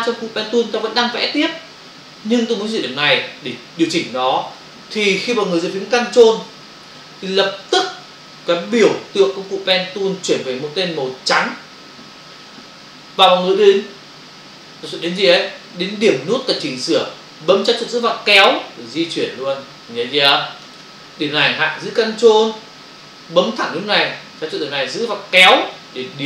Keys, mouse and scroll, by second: 17.8 ctrl+click, 25.1 ctrl+click.